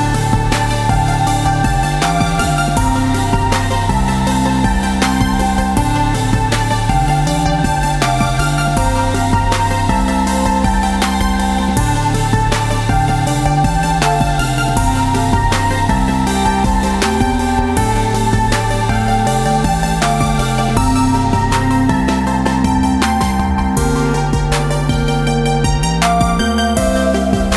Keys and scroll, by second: 0.3 d, 0.6 d, 1.1 d, 1.3 d, 6.3 ctrl+g, 7.1 Tab, 23.4 Tab, 24.2 ctrl+z.